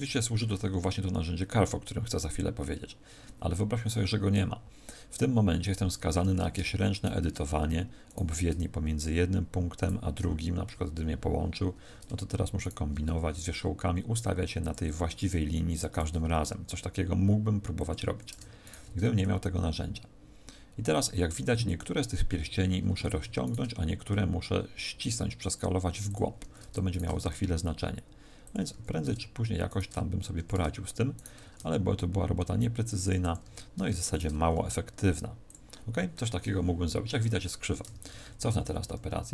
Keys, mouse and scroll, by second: 6.8 alt+shift+right click, 8.0 right click, 9.7 shift+right click, 10.7 f, 12.6 alt+shift+right click, 13.1 s, 14.6 click, 14.9 a, 15.8 alt+shift+right click, 16.2 s, 17.8 click, 18.2 a, 18.6 alt+shift+right click, 19.2 s, 21.7 click, 22.8 a, 23.4 alt+shift+right click, 24.0 s, 26.1 click, 26.4 a, 26.8 alt+shift+right click, 27.2 s, 28.6 click, 28.6 a, 29.6 alt+shift+right click, 30.3 a, 31.1 alt+shift+right click, 31.5 s, 33.3 click, 33.5 a, 34.0 alt+shift+right click, 34.5 s, 36.0 click, 37.8 ctrl+z, 38.0-39.3 ctrl+z.